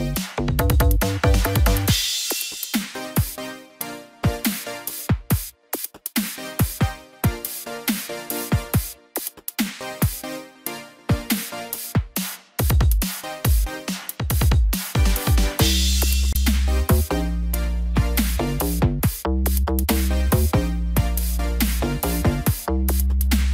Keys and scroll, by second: 18.1 ctrl+=.